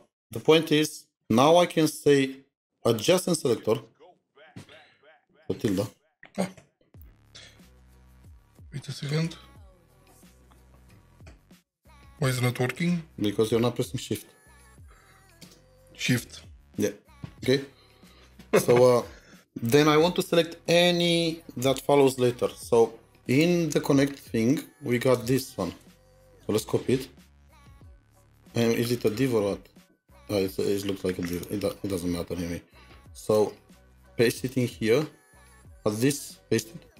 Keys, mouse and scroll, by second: 6.5-7.5 scroll, 7.5-7.8 scroll down 1, 8.0 ctrl+shift+#, 9.1 ctrl+#, 11.3 ctrl+#, 12.8 alt+#, 14.5 BackSpace, 15.4 space, 16.3 Return, 26.9 typing, 27.1 ctrl+c, 35.4 typing.